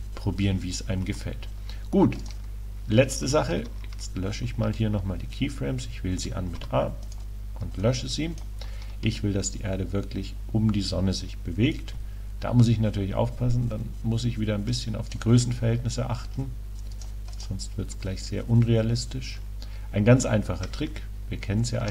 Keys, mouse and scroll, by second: 0.0 Escape, 1.1 KP_7, 2.3-2.9 drag, 3.5 click, 3.6 a, 6.6 x, 7.9-9.8 drag, 9.6-15.1 middle drag, 15.1 right click, 16.4-17.0 middle drag, 17.0-18.4 drag, 18.4 right click.